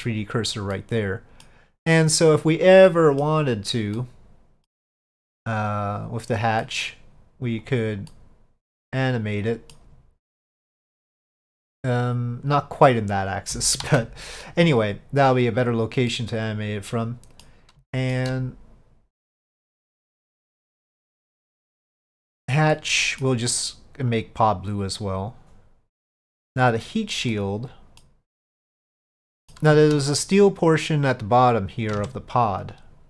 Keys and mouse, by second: 0.8-1.5 middle drag, 3.0 middle click, 4.0 middle click, 5.9 click, 6.7 middle drag, 7.7 click, 8.2-9.8 middle drag, 10.7-13.0 drag, 13.9 ctrl+z, 14.3 middle click, 14.8-16.2 drag, 16.2-17.5 middle drag, 18.0 shift+middle click, 21.3 click, 22.2 middle click, 22.8 middle click, 24.2 click, 26.8 click, 27.4-28.1 middle drag, 29.2-29.6 middle drag, 30.2 click, 32.0 Tab.